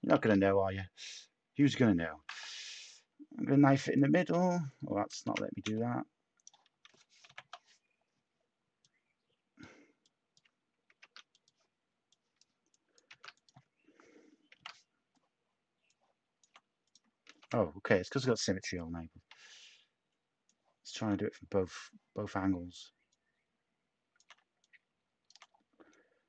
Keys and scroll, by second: 2.2 k, 5.1 ctrl+z, 5.6 z, 10.9 Return, 13.0 z, 14.5 k, 17.3 ctrl+z.